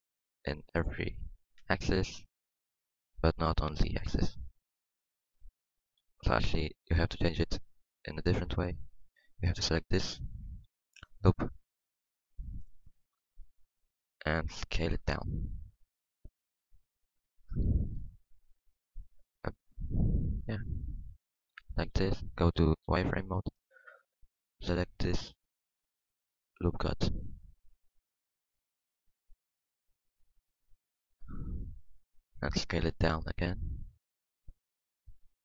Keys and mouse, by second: 3.4-4.7 drag, 4.4 ctrl+z, 4.7 ctrl+z, 6.0 Tab, 7.6 Tab, 9.3-12.8 middle drag, 14.9 KP_1, 15.4 KP_1, 16.8 s, 18.5 middle click, 18.9 s, 20.8 s, 21.5 s, 21.9 Tab, 22.6 Tab, 22.6 Tab, 22.7 z, 27.1-28.5 middle drag, 29.1-34.9 drag, 32.8 KP_1, 33.6 KP_1, 33.6 s.